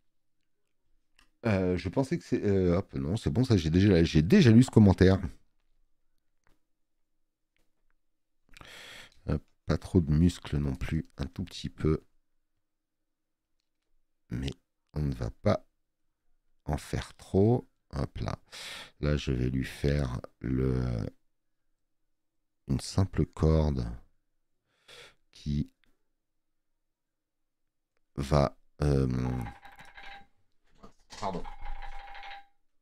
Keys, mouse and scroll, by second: 5.1 space, 5.1 click.